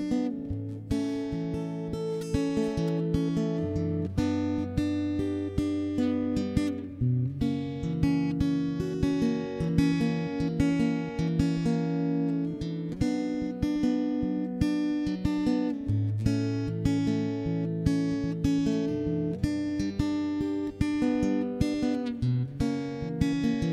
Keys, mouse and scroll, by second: 0.0-0.7 typing, 2.1 ctrl+KP_3, 2.3 middle click, 2.9 ctrl+,, 3.3 r, 4.5 middle click, 6.9 ctrl+s, 7.3 middle click, 8.1 ctrl+KP_1, 8.3 middle click, 8.9-11.1 typing, 10.5 middle click, 12.1 middle click, 13.1 middle click, 13.5 middle click, 15.1 a, 15.3 Escape, 15.5 a, 15.7 middle click, 15.9 c, 17.1 x, 17.3 middle click, 17.6 shift+space, 18.7 shift+space, 18.9 middle click, 20.4 Tab, 20.5 Tab, 20.6 middle click, 21.1 shift+space, 21.4 click, 21.7 shift+space, 22.0 middle click, 22.0 shift+space, 22.6 click, 22.8 middle click.